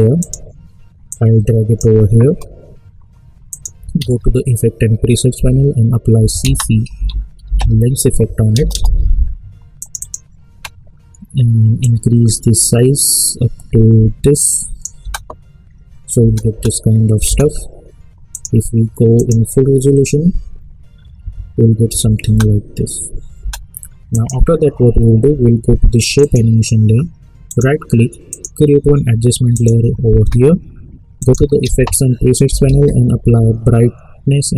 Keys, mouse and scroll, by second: 3.9 ctrl+a, 5.3-8.0 typing, 12.1-15.0 drag, 15.0 space, 18.3 click, 21.2 `, 21.9 `, 22.2 space, 24.1 click, 27.5 right click, 28.3 click, 31.6 ctrl+a, 32.2-33.2 typing.